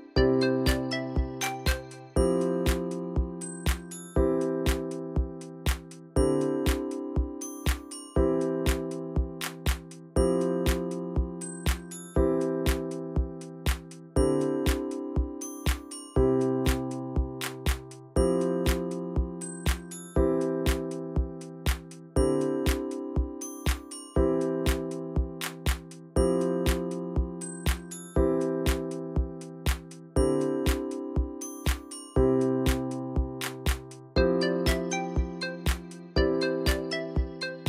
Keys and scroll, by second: 0.0-0.4 typing, 8.4 ctrl+z.